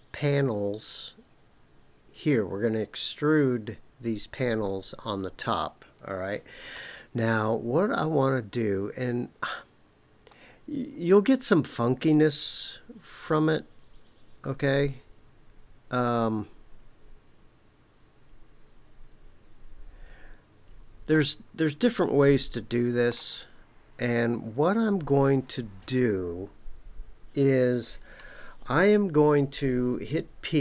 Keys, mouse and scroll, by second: 7.1-9.7 scroll down 1, 10.0-11.0 scroll up 1, 11.0-11.7 scroll up 1, 11.7-12.2 scroll up 1, 19.6-20.4 scroll down 2, 21.1-23.2 shift+middle drag.